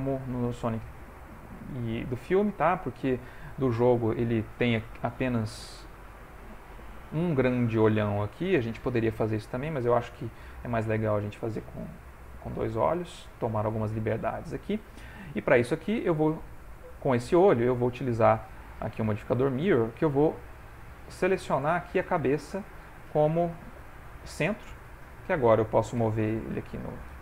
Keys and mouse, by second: 0.8 shift+middle click, 2.2 shift+middle click, 9.3 shift+middle click, 11.0 shift+middle click, 11.5 shift+middle click, 12.0 shift+middle click, 12.6 ctrl+middle click, 15.1 ctrl+middle click, 16.5 click, 17.7 click, 20.7 click, 23.3 middle click, 24.9 shift+middle click, 26.0 g.